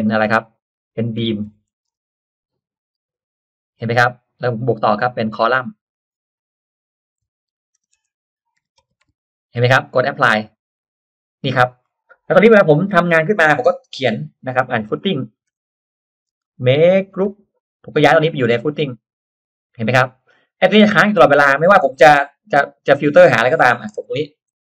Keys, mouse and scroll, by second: 0.9-2.3 typing, 3.0 click, 4.7 click, 7.3-9.5 typing, 10.3 click, 11.8-12.1 scroll down 1, 12.5 middle click, 12.6-13.0 scroll down 1, 12.8 click, 13.1-13.4 scroll up 1, 13.4 middle click, 13.8 middle click, 14.1 r, 14.2 click, 14.3 r, 14.6 click, 14.8 middle click, 14.9 scroll up 1, 15.6 click, 15.6 middle click, 15.6 p, 16.0 click, 16.3 space, 16.4 click, 16.6 click, 17.2 g, 17.8 click, 19.1 click, 19.8 drag, 20.2 middle click, 21.2 middle click, 21.8 middle click, 22.1 r, 22.5 click, 23.2 click, 23.6 middle click, 24.0 p, 24.2 click, 24.4-24.6 scroll down 1.